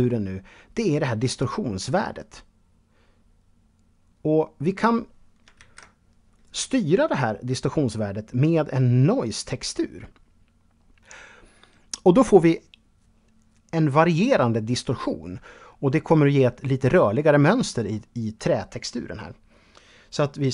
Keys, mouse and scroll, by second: 0.6 click, 4.8 ctrl+z, 7.1-8.9 drag.